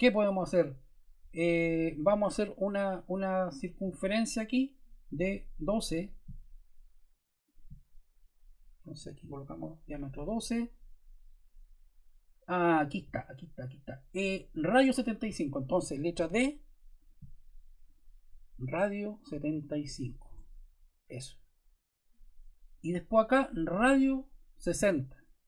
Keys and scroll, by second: 8.7-9.6 typing, 16.1 d, 19.5 7, 19.8 5, 20.2 Return.